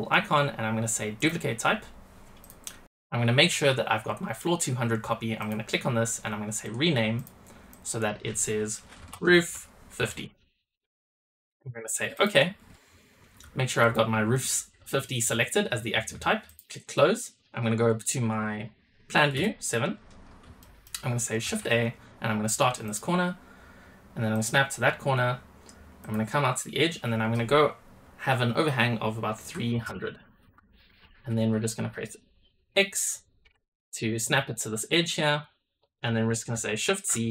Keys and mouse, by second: 16.9 middle click, 19.2 KP_7, 20.5 shift+middle drag, 21.4 shift+a.